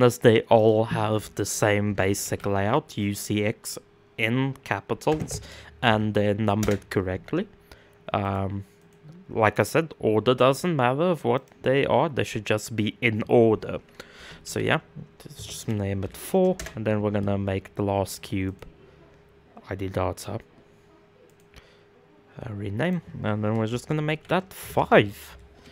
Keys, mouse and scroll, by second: 7.9 click, 8.4-17.7 right drag, 17.7 click, 18.0-25.7 right drag.